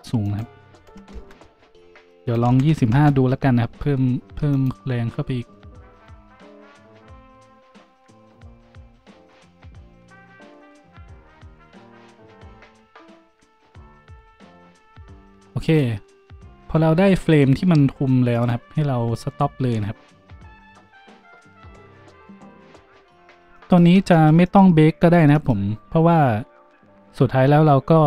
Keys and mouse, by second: 16.4-18.7 middle drag, 18.7-28.0 drag.